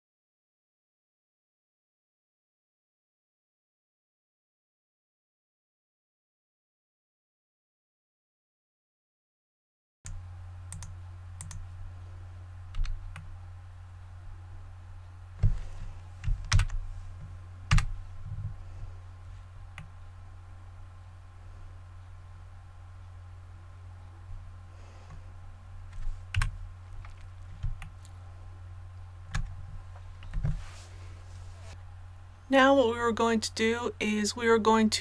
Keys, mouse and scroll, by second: 0.8 right click, 1.0-5.9 typing, 1.1 click, 1.5 right click, 1.5 shift+middle click, 1.7 click, 1.8 right click, 1.8 shift+middle click, 2.0 shift+middle click, 2.1 click, 2.3 ctrl+z, 2.4 right click, 2.6 click, 3.0 right click, 3.3 scroll down 1, 3.3 scroll up 1, 3.4 click, 3.7 right click, 3.8 shift+right click, 4.0 scroll down 1, 4.1 click, 4.5 right click, 4.5 click, 4.7 scroll up 1, 5.0 click, 5.5 right click, 5.7 scroll up 1, 5.8 scroll down 1, 5.9 click, 6.8 click, 6.9 right click, 6.9 click, 7.0 a, 7.1 middle click, 7.3 shift+middle click, 7.7 right click, 7.9 middle click, 8.0 shift+middle click, 8.2 shift+right click, 8.3 middle click, 8.4 shift+right click, 8.7 middle click, 9.0 shift+h, 9.0 KP_7, 9.1 c, 9.2 click, 10.0 right click, 10.7 click, 12.8 a, 13.1-15.6 middle drag, 16.5 alt+h, 17.7 a, 18.6 scroll down 1, 19.8-24.4 middle drag, 24.4 scroll up 1, 24.5 scroll down 1, 25.1 scroll up 1, 25.2 scroll down 1, 26.3 KP_1, 27.1 scroll down 1, 27.8 shift+middle click, 31.7 typing.